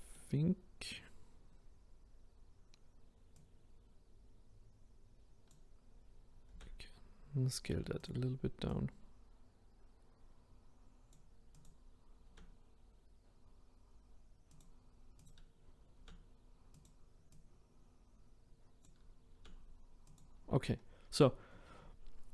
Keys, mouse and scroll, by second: 3.6 click, 6.5 s, 8.9 click, 11.6 click, 12.3 s, 15.3 click, 16.0 s, 17.4 click, 19.3 s.